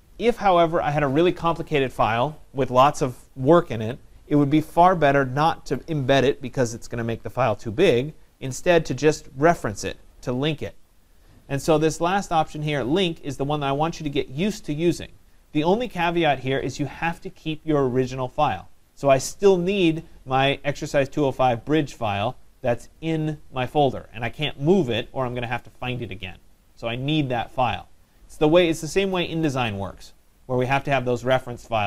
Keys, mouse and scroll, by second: 12.7-17.8 drag.